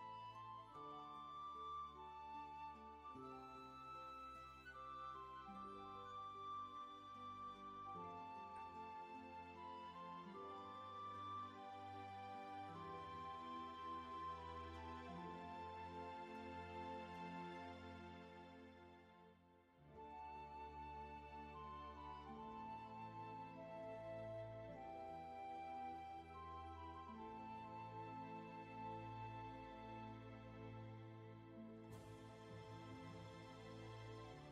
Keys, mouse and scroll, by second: 7.2 ctrl+z, 19.8 ctrl+z, 22.0 ctrl+shift+z, 31.6 ctrl+z, 33.9 ctrl+z.